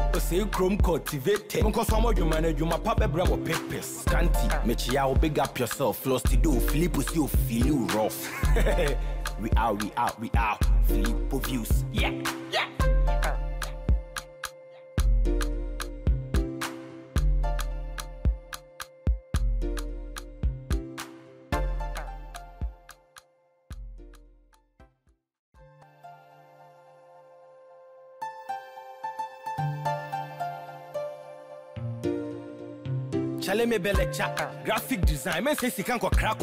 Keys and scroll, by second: 30.2 ctrl+t, 33.9 Return.